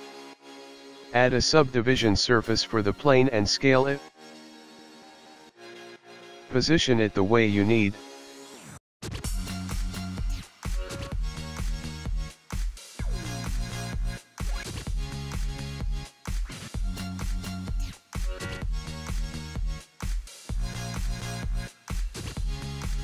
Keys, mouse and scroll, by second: 0.1 scroll down 2, 0.5 click, 1.2 click, 3.6-4.2 scroll down 3, 6.2 click, 7.0 click, 7.5 click, 9.4 KP_3, 10.7-11.2 scroll up 3, 11.7 scroll down 2, 12.2 click, 14.0 g, 17.0 click, 18.5 s, 21.1 click, 21.9 KP_0, 22.3 scroll up 1, 22.5 click, 22.6 s.